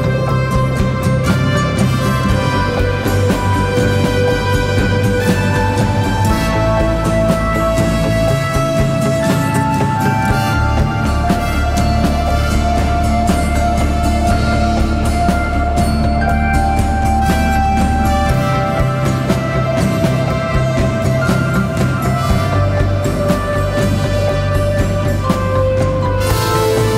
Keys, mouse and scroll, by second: 1.4-2.5 typing, 22.7 double click.